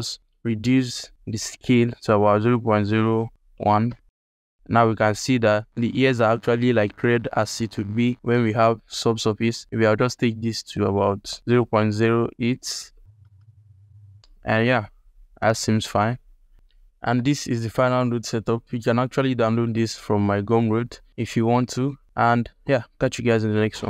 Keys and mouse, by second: 1.0 BackSpace, 9.6-12.9 drag, 10.7 BackSpace, 16.2 alt+click, 19.5 ctrl+space, 20.6 z, 21.1 ctrl+alt+click, 21.8 ctrl+alt+click.